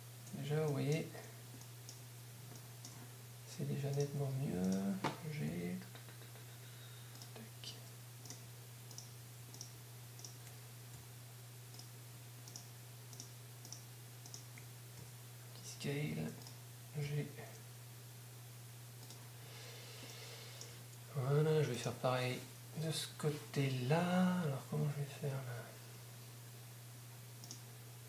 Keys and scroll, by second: 5.9 shift+g, 17.9 g.